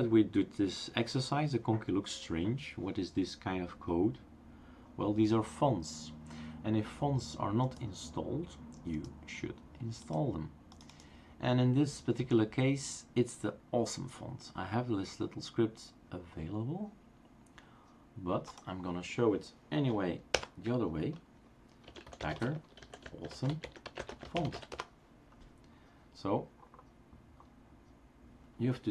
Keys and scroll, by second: 20.3 super+Return, 21.8-25.0 typing.